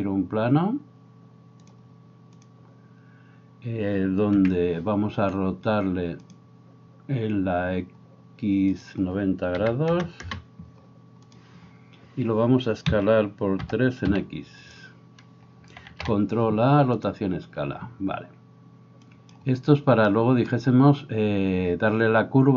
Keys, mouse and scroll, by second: 2.5-6.4 drag, 4.4 n, 6.4-8.8 right drag, 8.8-11.4 drag, 11.4-22.3 right drag, 12.9 s, 15.9 ctrl+a, 19.2-22.3 drag, 20.0-22.3 middle drag.